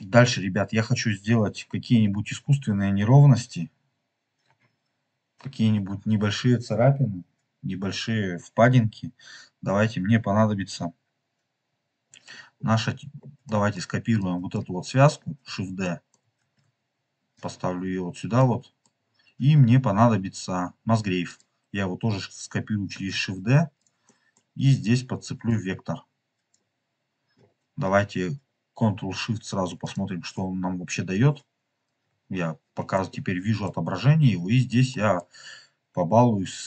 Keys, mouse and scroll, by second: 0.2 scroll down 3, 9.6 scroll up 2, 12.1-12.6 scroll up 3, 13.0 scroll down 1, 13.0 scroll down 1, 13.3 middle click, 14.5 click, 14.7-15.1 scroll up 2, 15.1 scroll down 2, 15.7 scroll down 1, 15.7 middle click, 16.4 shift+d, 17.3 click, 17.6 scroll up 2, 18.3 middle click, 18.9 scroll up 2, 19.5 scroll up 2, 21.2 click, 22.8 shift+d, 23.7 click, 24.0-25.4 middle drag, 25.4 click, 26.5 scroll up 1, 27.2 scroll down 2, 29.7 ctrl+shift+click, 31.9-32.8 scroll up 3, 32.0-34.2 middle drag, 34.2 scroll up 3, 35.0 middle click, 35.8 scroll up 2, 36.5 click.